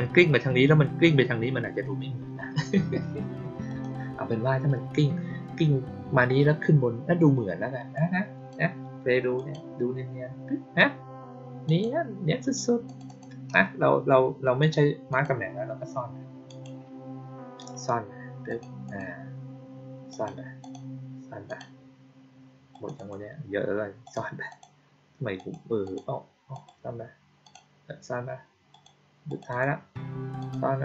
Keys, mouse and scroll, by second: 3.6 click, 7.8-8.4 drag, 9.3 click, 11.6 click, 12.8 click, 13.0 click, 14.5 click, 15.0 click, 16.4 click, 18.4 click, 18.8 click, 20.0 click, 20.5 click, 21.4 click, 22.6 click, 22.9 click, 23.9 click, 24.4 click, 25.3 click, 25.7 click, 26.4 click, 27.3 click, 28.6 click, 29.2 click, 29.4 click, 30.3 click.